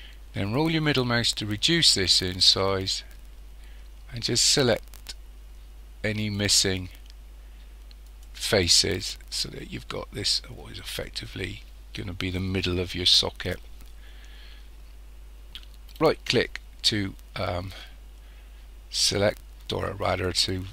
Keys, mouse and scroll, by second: 15.9 right click.